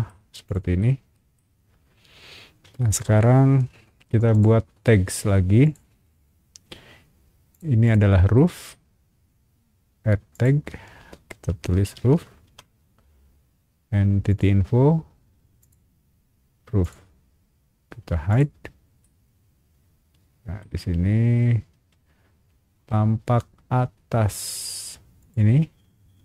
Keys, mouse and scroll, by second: 0.4 click, 0.8 shift+middle click, 1.6 scroll down 1, 4.3 shift+click, 5.6 click, 7.5 click, 7.8 click, 8.3 middle click, 10.3 click, 11.2-12.6 typing, 14.3 click, 15.6 click, 16.8 click, 18.3 click, 19.0-20.6 middle drag, 25.2 click.